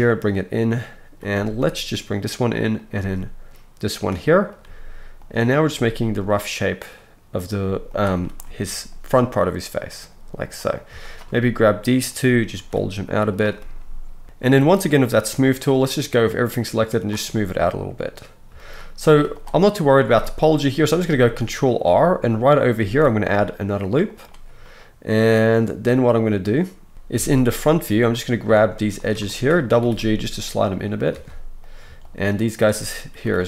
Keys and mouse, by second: 1.2 middle click, 1.2 right click, 1.3 g, 2.8 middle click, 2.8 right click, 2.9 g, 4.6 g, 5.7-7.4 middle drag, 5.7-7.4 right drag, 7.4 g, 7.6 g, 10.5 middle click, 11.1 shift+middle click, 12.5 g, 13.4 click, 14.2 ctrl+z, 14.2-24.3 middle drag, 19.1 z, 20.1 alt+a, 20.1-24.3 alt+drag, 20.1-28.4 alt+right drag, 22.8 ctrl+r, 27.1 KP_1, 28.1 click, 28.1 middle click, 28.4-32.4 shift+drag, 29.8 g, 31.1 alt+a, 31.6 middle click, 31.6 right click, 32.4 shift+middle click, 32.6-33.4 drag, 33.3 g.